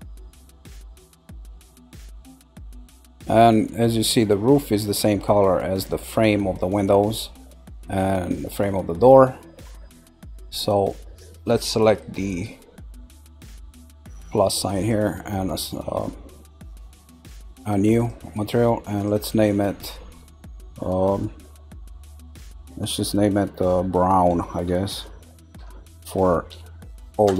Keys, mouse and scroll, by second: 0.3 shift+click, 0.8 shift+click, 1.2 shift+click, 1.6 shift+click, 2.2 shift+click, 2.7 click, 9.2-12.2 middle drag, 14.7 click, 17.9 click, 18.9 click, 19.1 click.